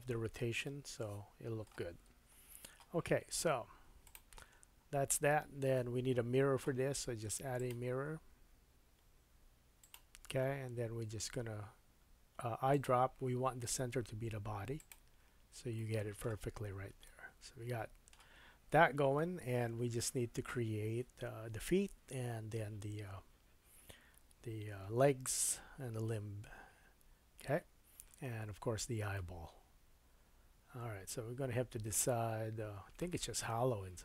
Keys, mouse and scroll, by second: 2.1 Tab, 2.4-3.7 scroll down 5, 4.0-12.8 drag, 4.6-5.1 scroll down 4, 5.7 middle click, 12.8-24.6 middle drag, 15.4 scroll down 2, 25.4 KP_1, 26.8-27.6 scroll down 4, 27.6-28.4 scroll up 3, 29.1 middle click, 29.7-34.0 middle drag.